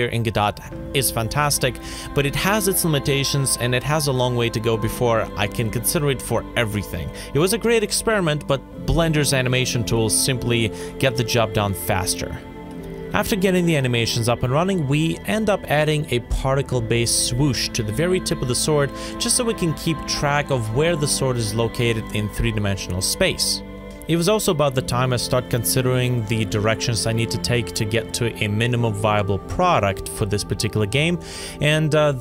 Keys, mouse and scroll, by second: 24.3 6, 24.4 Caps_Lock, 25.1 6, 25.6 scroll up 1, 25.9 middle click, 28.6 ctrl+z, 29.3 ctrl+z, 29.6 ctrl+z, 30.4 b.